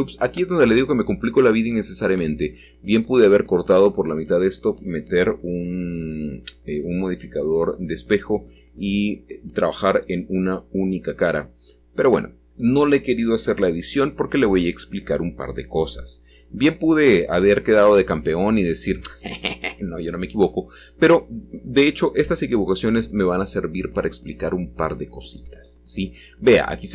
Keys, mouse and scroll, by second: 0.5-1.7 drag, 1.9 1, 5.4 1, 11.2 middle click, 13.8 alt+shift+click, 15.0-17.0 shift+middle drag, 16.1-17.0 scroll down 1, 19.6-26.2 ctrl+middle drag, 26.2 alt+shift+click.